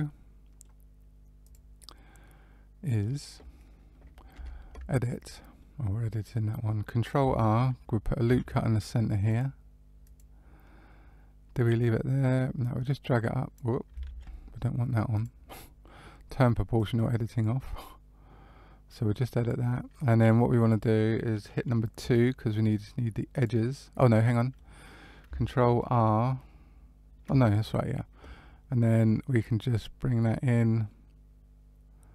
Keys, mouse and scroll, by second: 1.4 click, 1.9 middle click, 4.3 Tab, 5.5 middle click, 8.2 ctrl+r, 12.5 click, 12.5-13.9 scroll up 1, 14.0 ctrl+z, 14.1 scroll up 1, 15.1 click, 16.7 click, 19.8 middle click, 21.9 2, 23.3 click, 24.1 middle click, 27.3 middle click, 29.3 click.